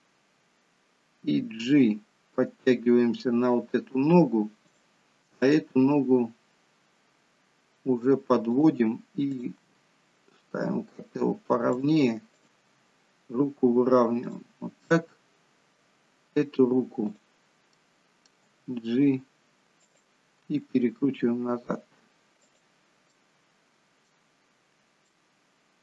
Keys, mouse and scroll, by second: 1.6 g, 5.4 click, 5.7 g, 9.3 click, 9.6 g, 12.3 click, 12.6 g, 14.8 middle click, 17.0 click, 17.6 middle click, 18.4 g, 20.5 r, 23.1 middle click, 25.0 middle click.